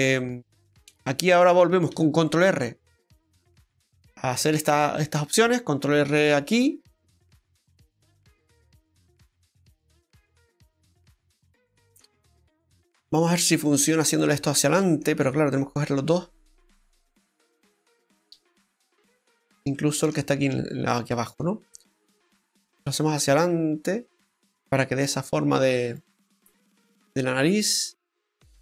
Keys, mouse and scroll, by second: 0.5 middle click, 1.9 ctrl+r, 4.1-4.5 scroll up 1, 4.5 middle click, 6.9 ctrl+z, 6.9 middle click, 6.9 scroll down 2, 7.3 ctrl+middle click, 8.2 middle click, 13.0 click, 13.8 right click, 14.2 middle click, 16.3 shift+right click, 16.7 middle click, 18.2 scroll up 2, 18.5 middle click, 19.0-19.7 scroll up 5, 19.7 shift+middle click, 21.1 shift+right click, 21.5 middle click, 21.9 click, 22.5 click, 26.2 middle click.